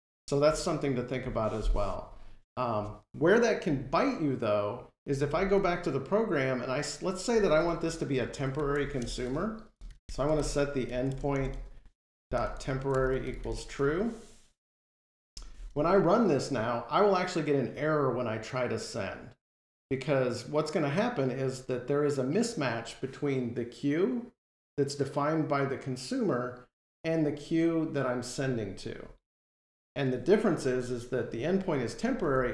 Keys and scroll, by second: 3.5 ctrl+Tab, 15.1 F5, 32.1 ctrl+Tab.